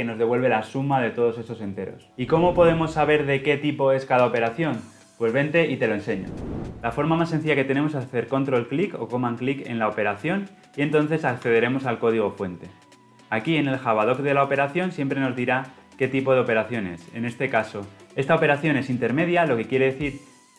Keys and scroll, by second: 11.0 ctrl+b.